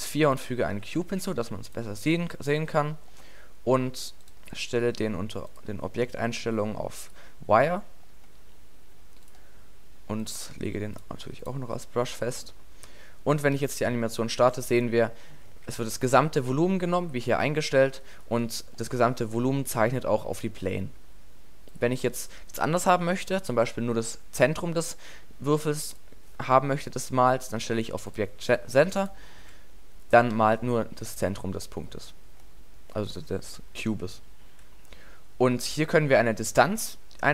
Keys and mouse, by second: 0.8 s, 1.8 click, 13.6 alt+a, 15.5 alt+a, 21.7 click, 23.8-25.9 middle drag, 27.9-29.0 middle drag, 29.3 alt+a, 30.4 alt+a.